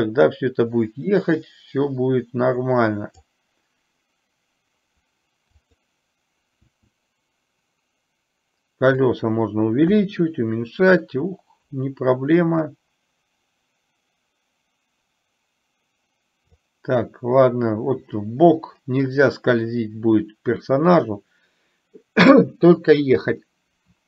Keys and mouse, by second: 5.7 click, 6.9 s, 12.9-16.7 drag.